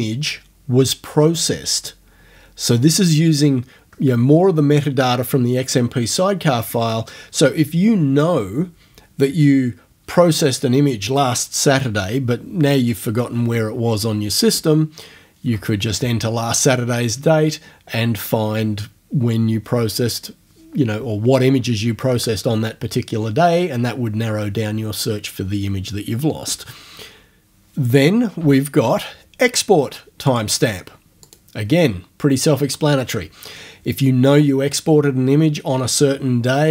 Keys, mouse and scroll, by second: 30.3 click, 31.3 click.